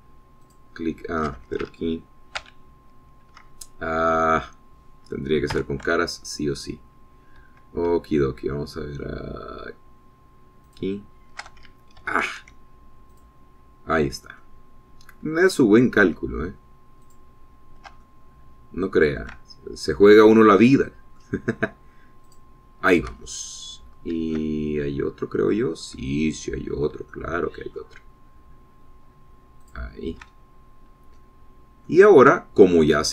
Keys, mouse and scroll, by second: 0.1 alt+shift+click, 1.9 alt+shift+click, 3.9 ctrl+z, 7.0 3, 12.1 alt+shift+click, 13.4 ctrl+z, 14.6 alt+shift+click, 15.8-17.1 alt+shift+middle drag, 17.1-18.8 shift+drag, 19.5-20.8 alt+shift+middle drag, 20.8 shift+click, 20.9 shift+scroll down 1, 22.0 shift+click, 23.7 alt+shift+click, 24.8-25.3 shift+scroll down 3, 25.8-27.5 shift+drag, 27.8 scroll up 2, 28.6 shift+middle click, 31.1 alt+shift+middle click, 31.9-32.2 alt+shift+scroll down 3, 32.6 middle click.